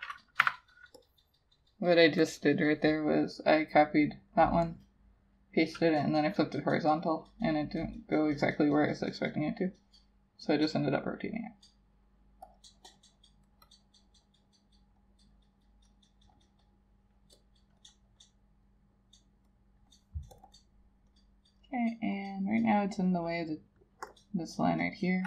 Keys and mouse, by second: 0.5 1, 12.6 double click, 17.5 double click.